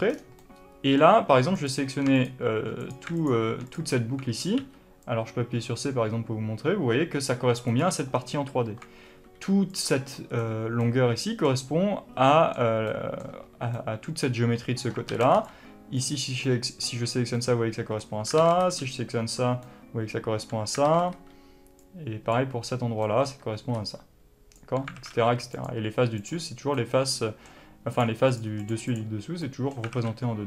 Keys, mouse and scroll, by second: 0.0 scroll down 1, 0.3-1.5 middle drag, 1.5 click, 2.0 shift+click, 2.7 shift+click, 3.1 alt+shift+click, 3.6 alt+click, 4.5 c, 7.7 right click, 8.5 alt+a, 10.7-25.4 middle drag, 15.0 alt+a, 17.1 scroll up 2, 18.3 alt+a, 20.8 alt+a, 23.6 b, 25.4 click, 26.1 click, 26.6-27.8 middle drag, 27.8 click, 28.2 click, 28.5 click, 28.8 click, 29.3 middle click, 29.8 alt+a.